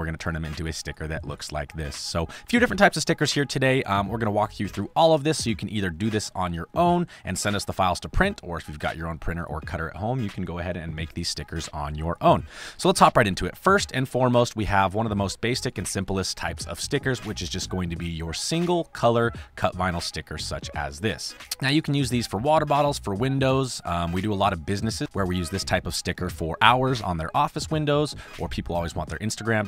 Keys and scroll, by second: 2.8 space, 13.2 space.